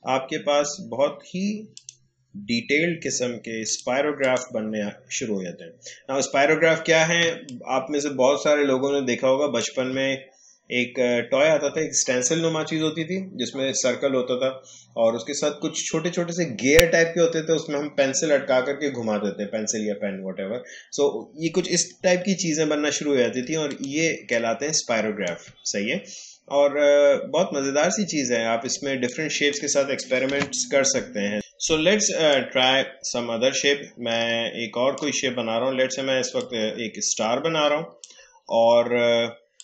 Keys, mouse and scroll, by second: 1.7 click, 5.4-5.9 alt+scroll up 1, 7.2 space, 7.4 click, 7.7 space, 22.3 alt+scroll down 1, 23.7 click, 24.6 space, 25.6 scroll up 2, 26.5 alt+scroll down 1, 27.5 alt+scroll up 1, 28.5 alt+scroll down 1, 29.0 click, 30.3 Delete, 32.3-39.6 drag.